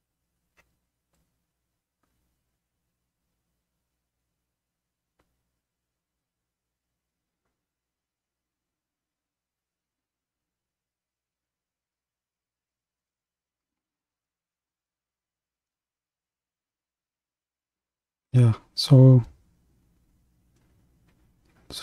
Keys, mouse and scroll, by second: 0.3 KP_3, 2.8 ctrl+KP_3, 7.7-14.9 drag, 14.9-19.9 middle drag, 19.9 KP_1.